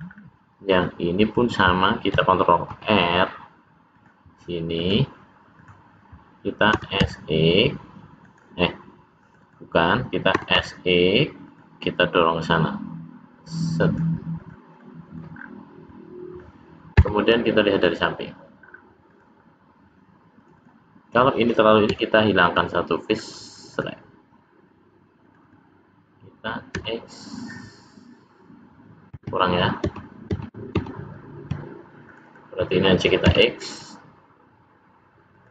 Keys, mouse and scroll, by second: 0.0 scroll down 3, 0.1 scroll up 2, 0.6-1.0 scroll up 2, 2.6 ctrl+r, 5.5 click, 6.7 s, 9.1 click, 9.4 click, 10.3 s, 12.5 click, 12.5 s, 14.3 click, 14.8 middle click, 15.3-15.8 scroll down 3, 15.8 middle click, 18.6 scroll down 1, 19.0 click, 20.3 click, 20.6 click, 21.8 x, 23.6 click, 25.2 click, 25.4 click, 26.7 x, 29.2 ctrl+z, 29.8 ctrl+z, 30.3 ctrl+z, 30.7 ctrl+z, 32.0 click, 32.2 click, 33.2 x.